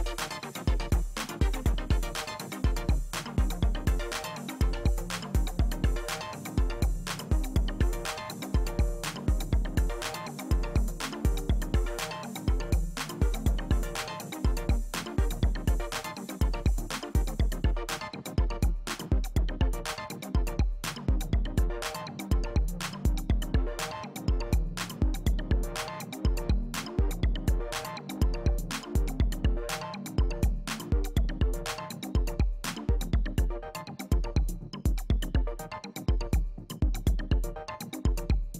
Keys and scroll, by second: 9.9 Escape, 14.2 space.